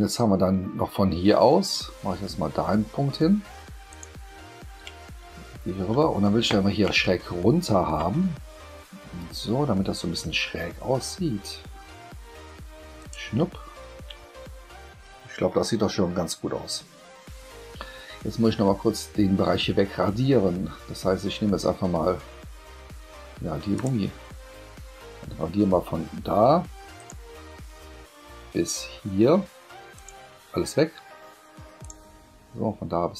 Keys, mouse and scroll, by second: 3.9 click, 4.1-5.7 middle drag, 13.0 shift+click, 23.7 click, 26.9 click, 29.9 shift+click, 31.8 click.